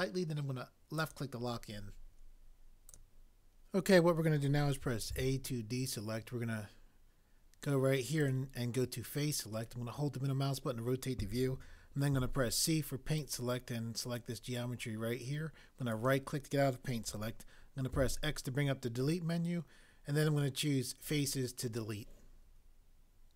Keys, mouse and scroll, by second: 5.1 a, 12.1 c, 17.9 x.